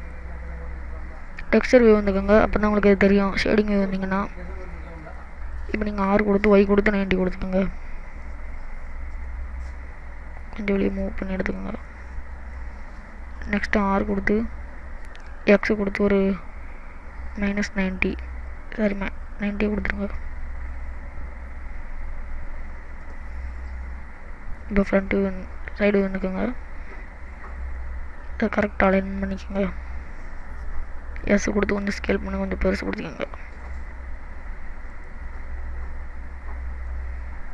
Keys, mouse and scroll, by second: 0.4 scroll up 2, 3.5 click, 3.8-4.2 scroll up 1, 4.2 middle click, 6.7 r, 10.8 click, 11.9 middle click, 14.1 r, 20.8 r, 25.1 KP_1, 25.9 KP_3, 26.9 scroll down 2, 27.8 click, 31.2 s, 36.8 click.